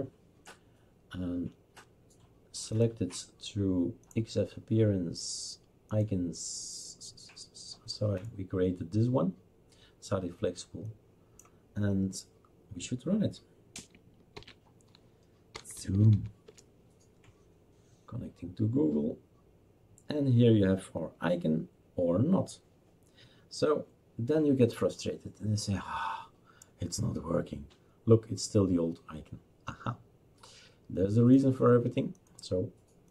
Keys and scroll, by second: 14.3 shift+super+d, 15.3-16.6 typing, 17.7 typing.